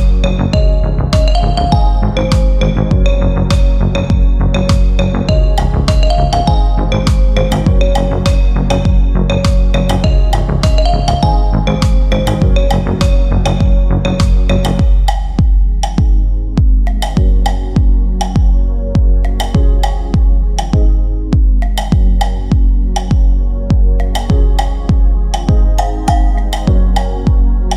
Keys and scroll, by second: 0.9 Delete, 4.7 ctrl+z, 8.1 Delete.